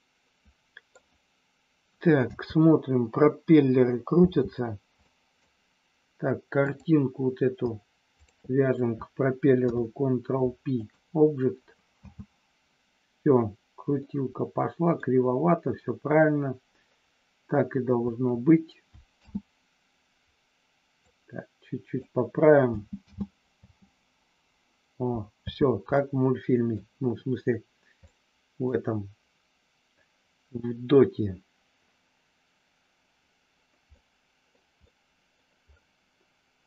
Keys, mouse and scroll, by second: 2.3 space, 4.1 space, 5.0 scroll up 1, 5.1 middle click, 6.5 click, 9.5 ctrl+p, 11.9 space, 14.0-15.0 middle drag, 19.1 space, 21.0-22.0 drag, 22.6 space, 23.0 space, 23.5 space, 25.4 space, 25.9 scroll up 1, 26.0 middle click, 28.1 middle click, 33.9 scroll up 1, 34.0 middle click, 34.9 middle click.